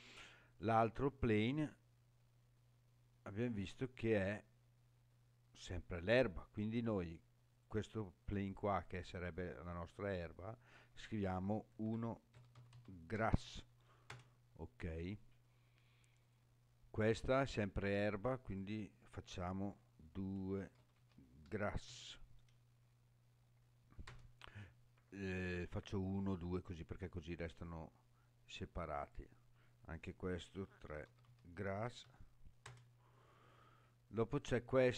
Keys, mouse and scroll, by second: 0.5 click, 1.4-2.1 scroll down 2, 2.1 scroll down 2, 7.5-14.7 drag, 13.3 s, 16.2 click, 18.5-24.8 drag, 27.4 click, 29.0-33.4 drag, 32.0 s, 34.4 click.